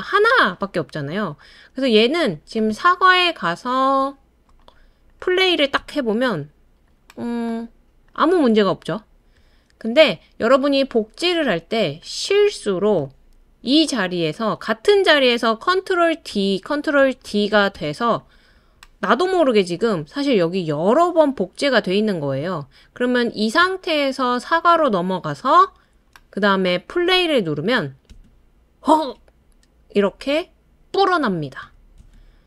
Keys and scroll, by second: 5.8 space, 16.3 super+d, 16.7 super+d, 17.0 super+d, 28.1 space, 32.0 space.